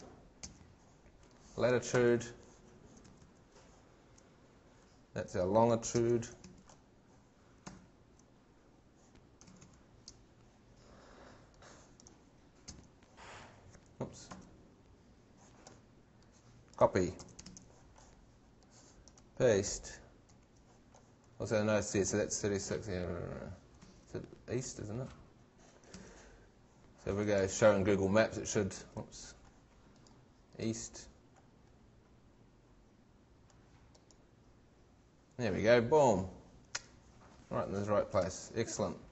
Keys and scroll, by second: 0.4 shift+super+v, 2.0 shift+super+Tab, 6.0 shift+super+v, 6.4 shift+super+Tab, 8.1 shift+super+Tab, 9.5 shift+super+Tab, 12.6 shift+super+v, 14.3 shift+super+Tab, 17.2 shift+super+c, 17.5 shift+super+Tab, 20.3 shift+super+v, 23.8 shift+super+Tab, 25.9 shift+super+Tab, 28.8 shift+super+Tab, 38.2 shift+super+Tab.